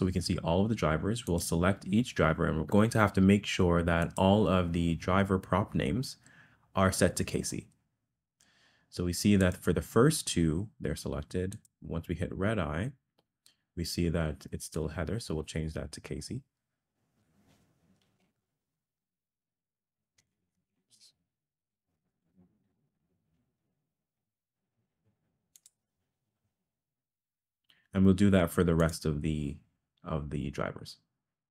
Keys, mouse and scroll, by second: 1.3 click, 4.0 click, 9.4 click, 11.5 click, 14.8-25.9 drag, 20.4 BackSpace, 20.5 BackSpace, 28.8 click.